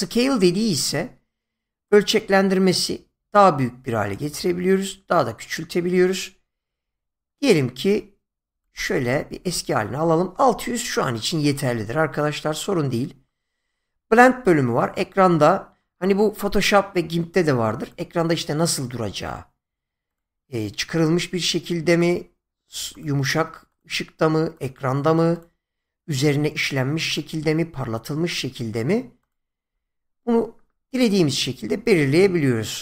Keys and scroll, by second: 9.3 ctrl+z.